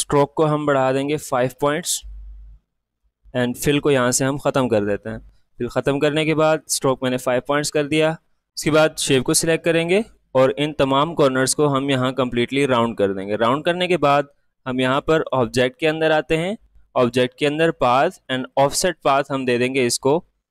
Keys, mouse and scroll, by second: 3.6 click, 10.1-13.5 drag, 14.6 click, 16.9-20.5 drag.